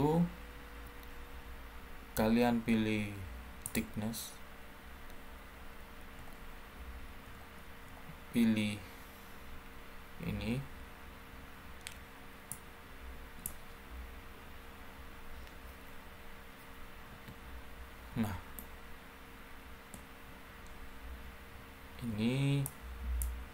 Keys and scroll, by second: 17.0 1.